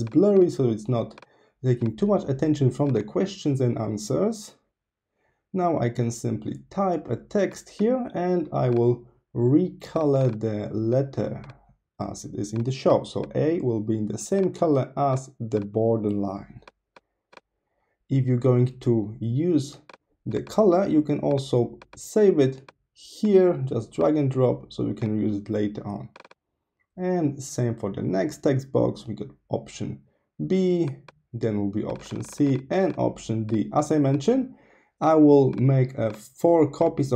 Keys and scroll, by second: 3.9-6.5 typing, 28.0-30.2 typing.